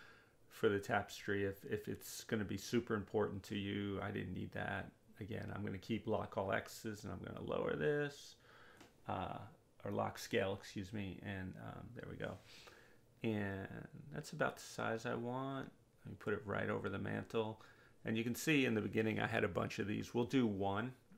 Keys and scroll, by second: 5.5 1, 5.8 0, 6.7 Return.